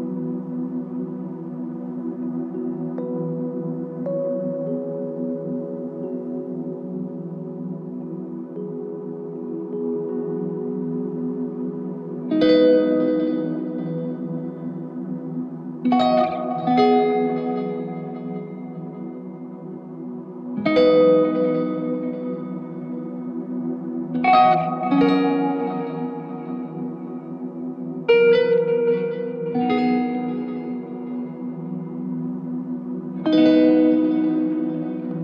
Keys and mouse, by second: 7.7 ctrl+click, 11.1 ctrl+click, 16.2 alt+click, 17.7 alt+click, 18.9 alt+click, 23.2 ctrl+click, 24.0 ctrl+click, 24.9 ctrl+l, 26.6 ctrl+click, 30.1 alt+click.